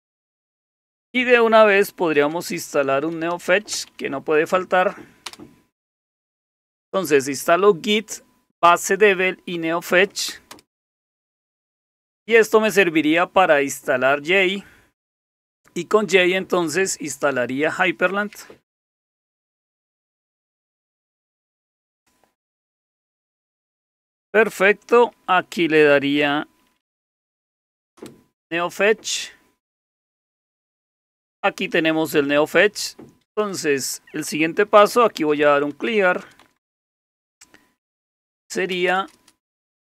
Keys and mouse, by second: 0.0-5.8 typing, 10.5 Return, 26.5-27.7 typing, 27.9 Return, 29.2 typing, 34.7-37.1 typing, 38.3-39.1 typing.